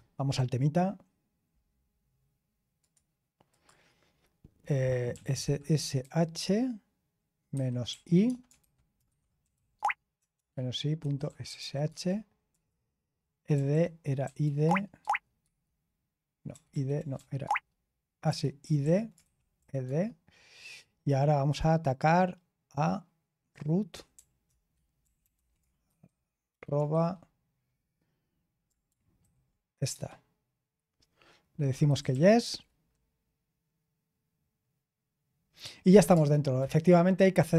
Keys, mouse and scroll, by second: 2.7 click, 3.2 click, 5.1-6.3 typing, 7.5-14.9 typing, 16.5-16.9 typing, 18.2 typing, 19.5-20.3 typing, 23.2-26.8 typing, 29.2 ctrl+v, 29.9 Return, 31.6-32.5 typing, 35.6-36.5 typing, 36.5 Return.